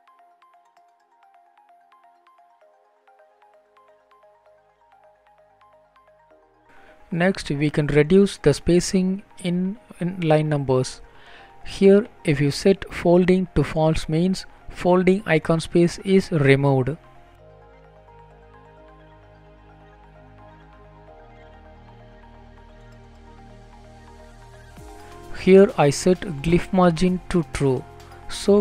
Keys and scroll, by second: 4.5 Return, 14.6 ctrl+s, 26.6 Return.